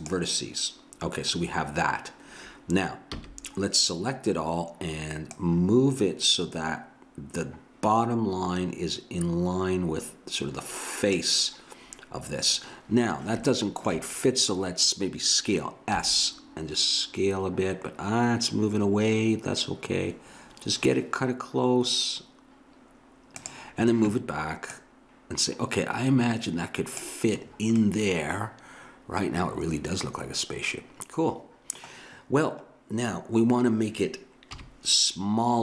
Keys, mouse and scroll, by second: 3.2 a, 5.3-7.0 middle drag, 13.5 middle click, 16.0 s, 24.7 click, 27.6 middle click, 34.6 KP_3.